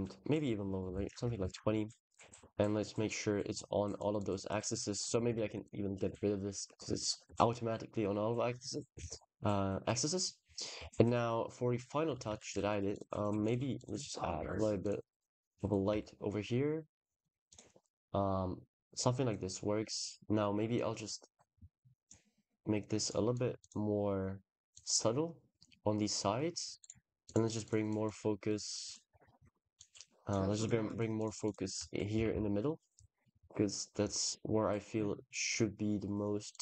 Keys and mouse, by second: 0.2 shift+click, 1.3 ctrl+s, 2.6 click, 3.3 drag, 4.0 click, 5.0 click, 5.2 x, 5.5 click, 6.5 ctrl+s, 8.8 ctrl+s, 12.2 ctrl+s, 12.7 click, 14.2 shift+d, 14.7 click, 14.9 r, 15.1 r, 15.7 g, 17.3 click, 19.1 click, 20.7-21.9 drag, 22.8 click, 23.2 click, 24.6-26.2 drag, 26.7 click, 27.1 click, 27.5 click, 27.7 click, 28.4 click, 29.7 click, 30.7 drag, 31.0 click, 31.3 click, 31.5 click, 31.9 g, 32.1 z, 33.1 click, 36.3 click.